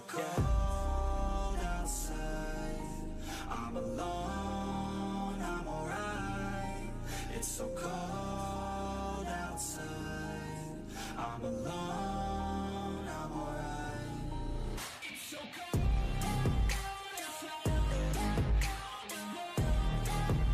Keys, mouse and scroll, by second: 0.2-3.3 typing, 5.6 e, 6.4 ctrl+z, 6.6 ctrl+z, 7.4 s, 11.7-12.6 shift+middle drag, 12.6 e, 13.5 s, 15.4 s, 18.8 e, 19.4 s.